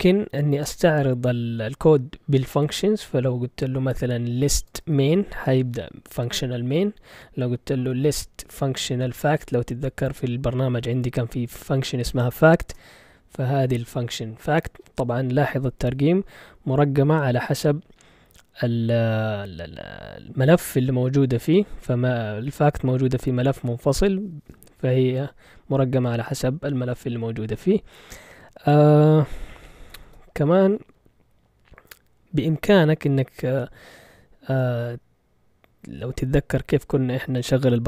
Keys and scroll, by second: 4.1-5.6 typing, 7.9-10.0 typing, 12.7 Return, 30.0 ctrl+l, 37.2 q, 37.4 Return.